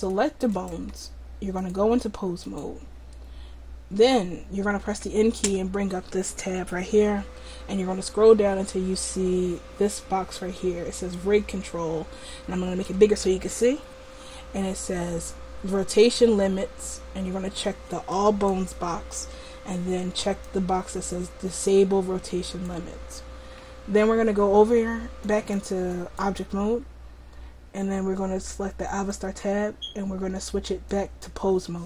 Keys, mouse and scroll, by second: 0.1-1.3 drag, 1.5 click, 2.7-4.9 drag, 4.9 n, 5.4 n, 11.1-22.7 drag, 25.2-31.8 drag.